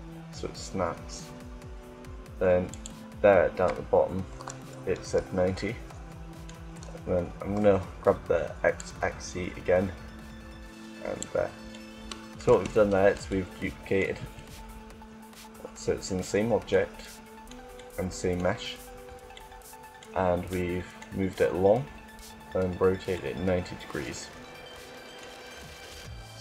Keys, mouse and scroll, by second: 2.6-4.6 drag, 5.2-8.4 middle drag, 8.5-10.2 drag, 11.7 middle click, 12.2 Tab, 13.2-15.4 middle drag, 16.4-20.3 middle drag, 20.5 middle click, 20.7 middle click, 24.7 middle click.